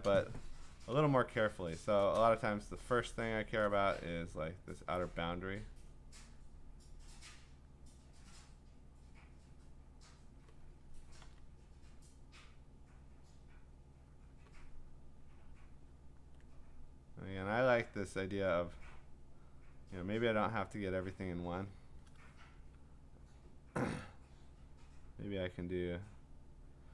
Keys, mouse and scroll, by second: 1.5-3.1 click, 2.7 click, 2.7 click, 3.2 click, 3.4 click, 3.6 click, 4.7 click, 6.2 click, 7.7 click, 8.4 click, 9.9 click, 11.2 ctrl+z, 13.1 click, 14.3 click, 17.7 click, 18.7 click, 19.4 click, 20.7 click, 21.4 click, 22.5-24.7 `, 24.7 click, 24.7 `, 25.0 `, 25.6 click, 26.7 click.